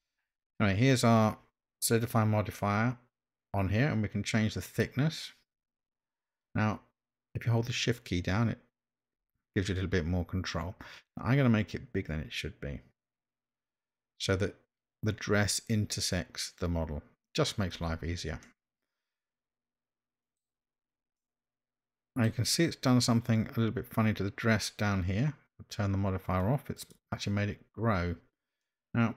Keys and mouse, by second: 4.1-17.8 drag, 18.4-20.4 middle drag, 21.2-22.3 middle drag, 26.3 click, 26.8 click, 28.7-29.1 middle drag.